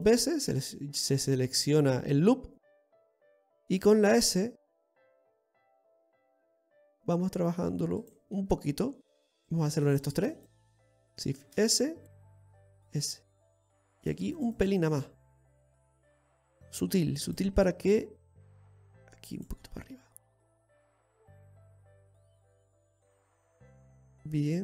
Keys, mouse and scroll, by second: 0.3 alt+shift+right click, 4.8 s, 9.1 middle click, 9.9 right click, 10.5 alt+shift+right click, 12.1 shift+s, 13.4 s, 14.7 right click, 15.0 alt+shift+right click, 16.3 right click, 17.1 shift+s, 18.2 s, 20.0 right click, 21.1 right click, 21.6 click, 23.7-24.2 scroll down 2, 24.1 middle click.